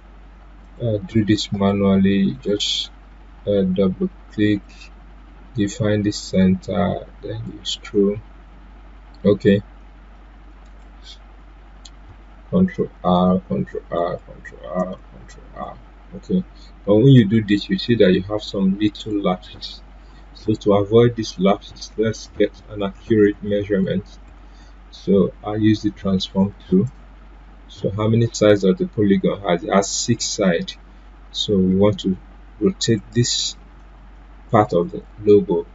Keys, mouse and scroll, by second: 0.6-10.6 drag, 10.6 right click, 12.7 ctrl+r, 21.4 ctrl+r, 26.8 click, 32.8 click.